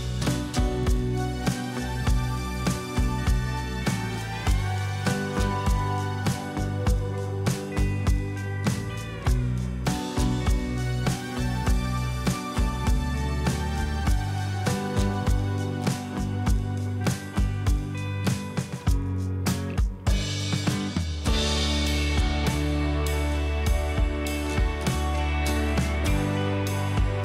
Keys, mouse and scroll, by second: 3.1 Return, 3.8 Return, 3.9 ctrl+z, 5.5 shift+Right, 5.6 shift+Right, 5.8 shift+Right, 6.0 shift+Right, 6.4 shift+Up, 7.1 Down, 7.3 Down, 7.4 Down, 8.1 ctrl+shift+], 9.8 ctrl+[, 11.2 alt+scroll up 1, 11.7 space, 13.2 shift+click, 14.1 ctrl+shift+], 14.8 alt+scroll down 1, 15.8 double click, 17.1 click, 17.1 right click, 17.7 click, 17.7 scroll down 3, 18.1 space, 18.2 click, 19.1-22.6 drag, 23.8 double click, 24.6 alt+click, 24.6 alt+right click, 27.0 double click.